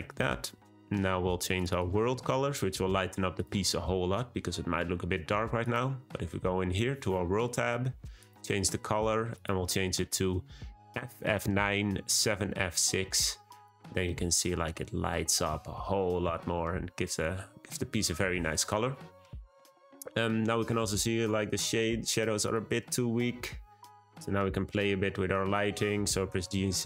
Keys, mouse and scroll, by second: 3.3 click, 4.7-5.6 scroll down 1, 5.6 click, 8.1 click, 14.2-14.7 scroll up 2, 15.2-17.9 scroll up 1, 20.0 scroll down 1, 22.4 click, 23.0-26.1 scroll down 1, 26.2 g.